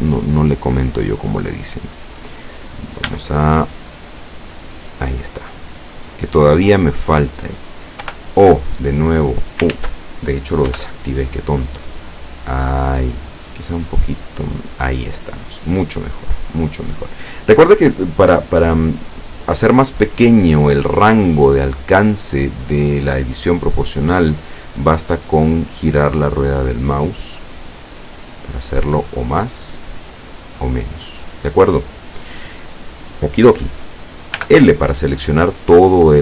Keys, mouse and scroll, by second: 1.7 click, 3.1 b, 4.0 click, 5.9 scroll down 1, 6.2-7.6 middle drag, 8.1 o, 8.8 click, 9.8 ctrl+z, 10.8 o, 11.6-13.5 drag, 13.5-14.1 scroll up 2, 16.1-16.7 scroll down 2, 18.4-20.5 middle drag, 21.1-24.3 drag, 24.7-26.4 drag, 26.4-27.4 scroll up 1, 27.7-28.2 scroll down 1, 28.4-28.8 scroll down 1, 29.0 scroll down 1, 29.5-29.9 scroll up 1, 32.8 scroll up 1, 34.4 l.